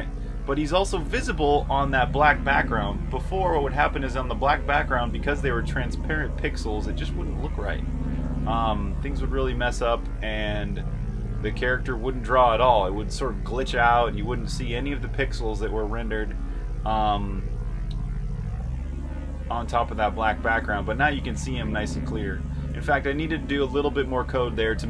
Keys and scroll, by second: 0.0-0.1 typing, 6.6-10.4 typing, 11.9 r, 13.2-14.5 typing, 18.9-24.5 typing.